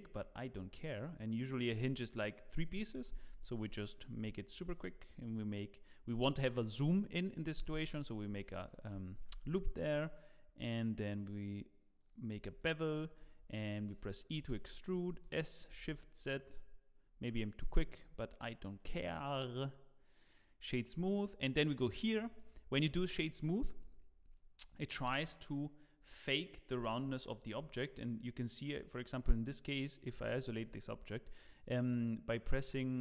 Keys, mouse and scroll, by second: 0.1-0.6 scroll up 8, 0.7 middle click, 3.4 Tab, 4.5 ctrl+r, 8.0-8.3 scroll up 2, 8.3 shift+middle click, 9.1 ctrl+b, 12.3 scroll up 2, 12.6 shift+middle click, 13.9 e, 15.1 s, 17.7 Tab, 17.9 scroll down 5, 18.6 right click, 21.2 click, 23.7-24.3 scroll up 2, 24.3-26.9 scroll up 1, 27.1-27.7 scroll down 1, 27.7 middle click, 27.7-28.0 scroll down 2, 30.1 KP_Divide, 31.0 middle click, 32.7 right click.